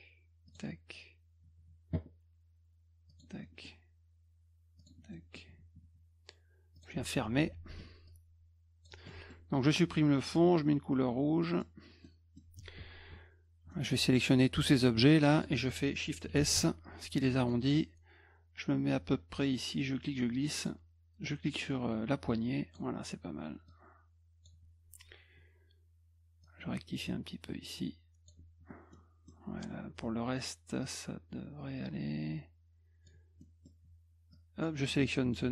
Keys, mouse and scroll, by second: 0.5 click, 3.1 click, 3.4 middle click, 4.8 click, 5.1 middle click, 6.7 click, 8.1 click, 9.1 middle click, 10.2 click, 11.5 middle click, 12.0 middle click, 13.7 middle click, 14.5 click, 16.4 shift+s, 17.3 middle click, 19.8 click, 21.4-22.7 drag, 23.7 click, 26.4-28.3 drag, 28.9 middle click, 30.8-33.0 drag, 33.4 middle click, 34.3 click.